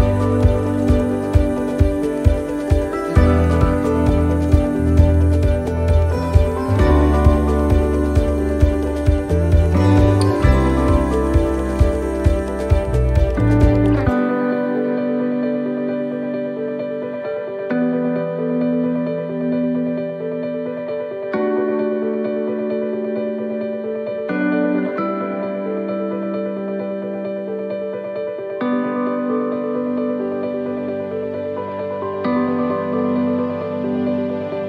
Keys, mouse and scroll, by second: 0.8 click, 8.1 click, 9.3 click, 14.3 ctrl+z, 16.1 ctrl+z, 27.0 ctrl+z, 30.5 ctrl+z, 31.4 right click, 32.7 click, 34.3 right click.